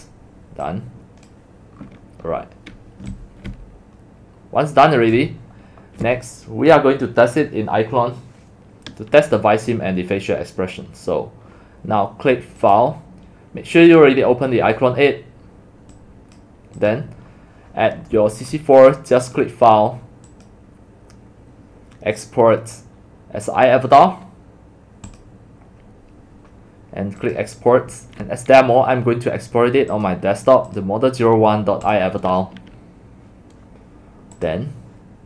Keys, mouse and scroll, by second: 3.2 x, 3.6-4.2 c, 4.4 c, 14.5 click, 15.0 right click, 15.8 click, 16.2 click, 27.4 click, 34.7 click.